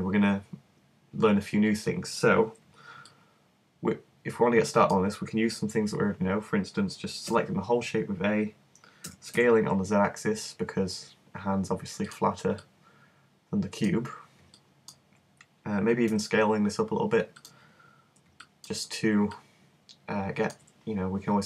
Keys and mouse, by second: 3.1-4.8 middle drag, 7.3 a, 9.1 s, 12.1-16.2 drag, 16.2 s, 17.5 click.